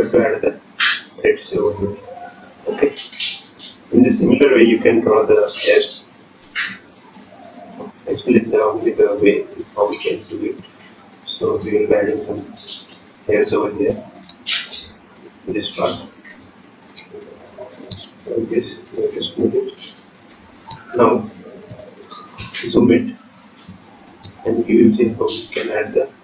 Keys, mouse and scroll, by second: 1.0 ctrl+click, 1.6 ctrl+click, 2.9 ctrl+click, 6.7 ctrl+click, 7.2 click, 7.9 ctrl+click, 8.9 click, 9.9 ctrl+click, 10.1-10.5 scroll down 2, 10.5-12.0 scroll up 3, 11.1 shift+middle click, 13.7 ctrl+click, 16.1 ctrl+click, 17.9 ctrl+click, 18.7 ctrl+click, 19.7-20.4 scroll up 3, 21.7 ctrl+click, 23.5 click.